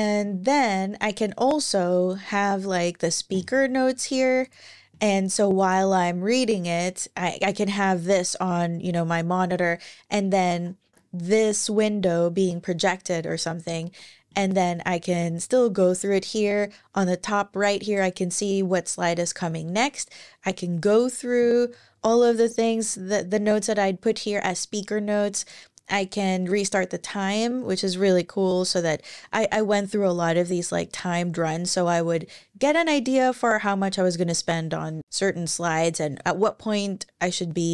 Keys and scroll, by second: 2.0 ctrl+alt+i, 10.6 super+`, 12.9 super+`, 14.8 Right.